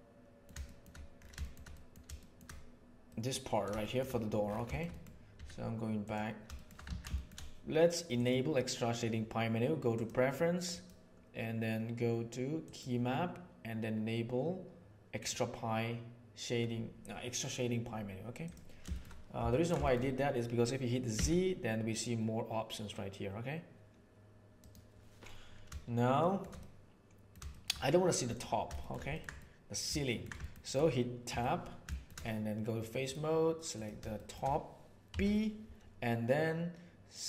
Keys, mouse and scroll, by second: 0.6 shift+middle drag, 1.4-1.8 shift+middle drag, 2.1 shift+middle drag, 3.0 middle click, 3.8 shift+middle drag, 4.6 shift+middle click, 4.8 middle click, 5.4 z, 6.4 shift+middle click, 7.1 middle drag, 8.3-10.0 drag, 19.4 ctrl+middle drag, 19.8 shift+middle click, 21.0 z, 26.1 shift+middle click, 26.5-27.2 middle drag, 27.4 shift+middle drag, 28.2 click, 28.7 shift+middle drag, 29.0 ctrl+middle drag, 29.3 middle click, 30.0 ctrl+middle click, 30.4 shift+middle click, 31.2 Tab, 31.9 shift+click, 33.6 click, 34.1 middle click, 35.0 p.